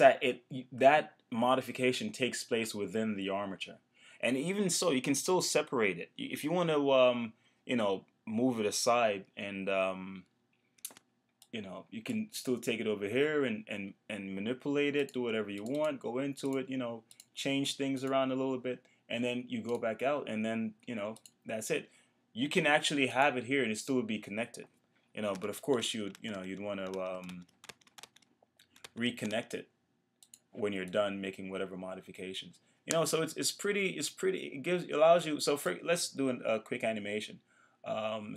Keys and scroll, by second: 25.4 super+z.